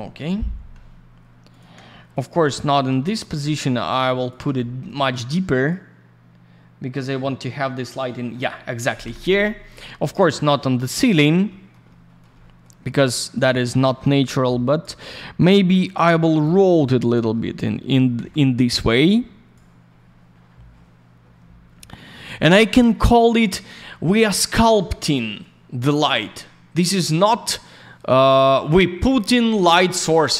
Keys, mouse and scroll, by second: 1.5 ctrl+click, 1.9 alt+middle click, 2.4 й, 3.0 click, 4.3 ctrl+click, 4.5 alt+middle click, 5.6 click, 9.0 Escape, 10.7 alt+middle click, 11.5 middle click, 11.8 alt+middle click, 12.3 middle click, 13.3 click, 13.4 click, 14.2 click, 15.1 alt+middle click, 16.3 alt+n, 16.4 click, 17.3 alt+middle click, 18.8 click, 21.4 scroll down 1, 22.8 click, 24.4 click, 24.5 click, 25.3 ц, 25.4 click, 28.4 ц.